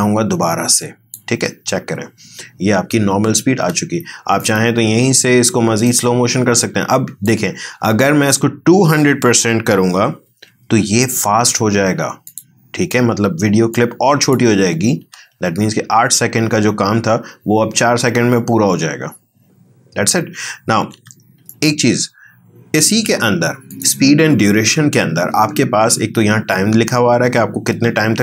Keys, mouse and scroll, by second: 1.7 space, 3.6 space, 4.4 right click, 5.9 click, 13.1 click, 13.3 click, 15.0 space, 20.3 space, 21.5 right click, 23.7 click.